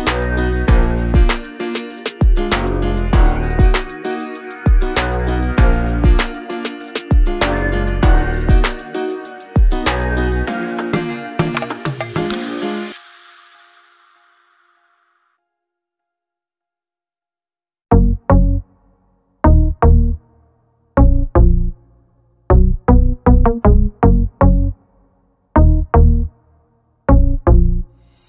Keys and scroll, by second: 6.8 p, 8.3 space, 9.1 Delete, 13.2 m, 14.3 Right, 14.8 Left, 15.2 Right, 16.2 space, 16.8 p, 18.9 space, 19.0 Escape, 21.3 r.